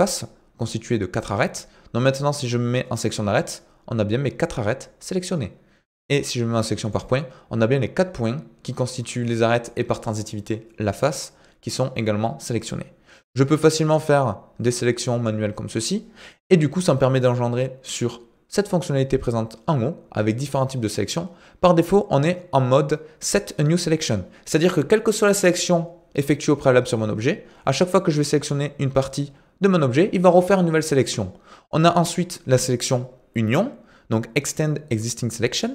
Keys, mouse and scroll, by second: 3.0 click, 6.9 click, 13.8-15.3 drag, 28.0 click, 35.6 click.